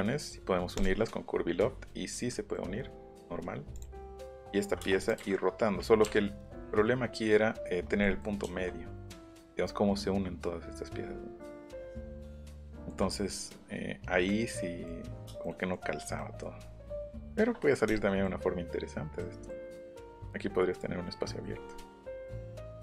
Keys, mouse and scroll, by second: 0.7 click, 1.8 middle click, 2.3 middle click, 3.1 scroll down 1, 3.3 scroll up 1, 3.7 click, 4.0 scroll down 1, 4.4-4.8 scroll up 1, 4.8 space, 5.0 click, 6.0 Up, 7.3-7.9 scroll up 2, 8.0 middle click, 8.5 shift+middle click, 8.8 scroll up 1, 12.6 shift+middle click, 19.2-19.5 scroll up 1, 21.5 middle click, 21.9 scroll up 1, 22.6 click.